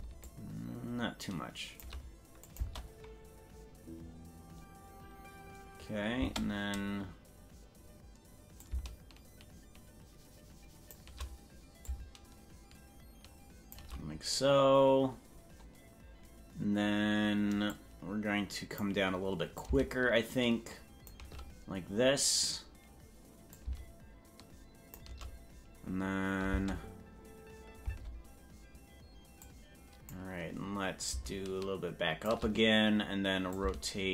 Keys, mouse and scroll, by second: 0.2-1.9 shift+drag, 2.5 click, 2.8 space, 6.4 space, 8.6-11.0 shift+drag, 11.8-13.8 shift+drag, 17.8-18.9 drag, 19.6-21.2 shift+drag, 23.5-25.0 drag, 26.6 space, 28.0 space, 29.5 click, 31.1-32.3 shift+drag, 33.5-34.1 shift+drag.